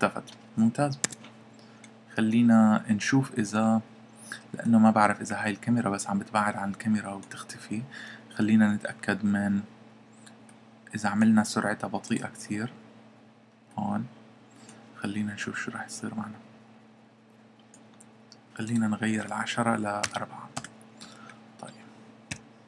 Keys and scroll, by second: 1.0 Escape, 20.0 4, 22.3 p.